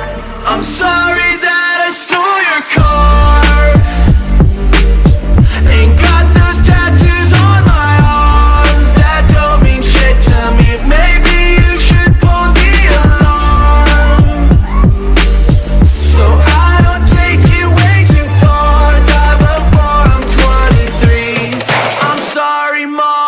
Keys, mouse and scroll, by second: 0.0 alt+shift+click, 1.1 shift+space, 1.4 shift+click, 3.1 ctrl+alt+scroll down 1, 4.1-8.1 alt+shift+drag, 9.2 ctrl+0, 9.8 space, 10.0 click, 10.1 space, 11.0 click, 16.1-19.0 alt+drag, 19.0 ctrl+d, 21.2 ctrl+alt+scroll up 1, 21.9 ctrl+space, 22.0 click, 22.9 ctrl+alt+scroll down 1.